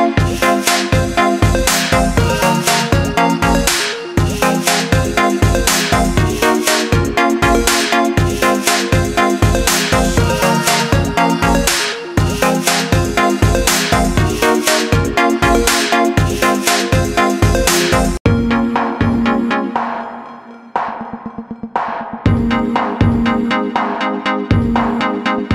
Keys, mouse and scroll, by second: 0.5-3.5 drag, 4.1-5.2 middle drag, 5.2 click, 5.4 click, 6.2-8.0 middle drag, 8.0 click, 9.5 click, 10.4-12.8 drag, 12.8-13.7 scroll down 2, 13.7-14.8 scroll down 2, 14.8-17.4 drag, 18.9 click, 21.9-24.9 drag, 25.2-25.5 middle drag.